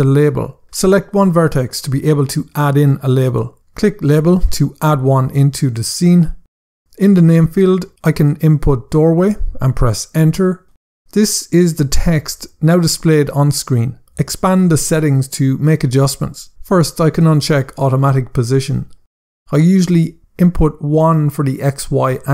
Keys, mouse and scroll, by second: 1.7 click, 4.1 click, 5.5 scroll down 1, 6.5 click, 7.3-9.1 typing, 9.3 Return, 14.3 click, 15.7 scroll down 1, 17.6 click, 20.8 click, 21.4 1, 21.6 Tab, 21.9 1, 22.1 Tab.